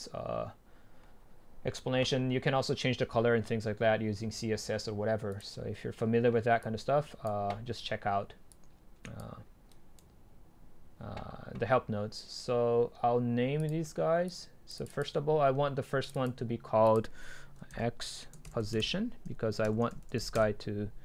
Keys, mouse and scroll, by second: 0.4-0.7 scroll down 2, 0.7-2.2 scroll up 2, 2.2-2.8 scroll up 1, 2.8 scroll up 1, 6.7 click, 9.9-11.9 right drag, 13.8-19.1 drag, 19.3 Delete, 20.4 Return.